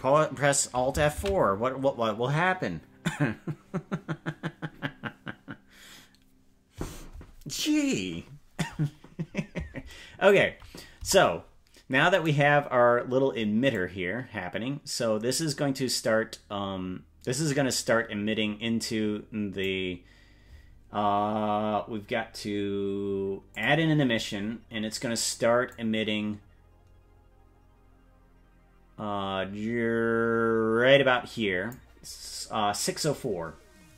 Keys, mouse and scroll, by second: 3.1 ctrl+s, 11.1 KP_0, 12.3 right click, 13.7-19.7 drag, 23.5 click, 25.7-31.8 drag.